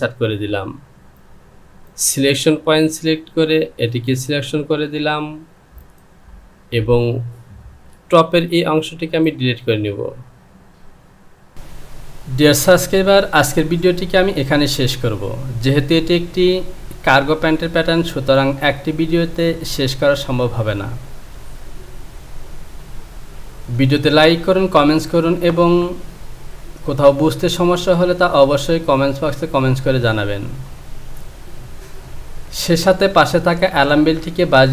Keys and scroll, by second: 8.2 Return, 11.5 KP_Decimal.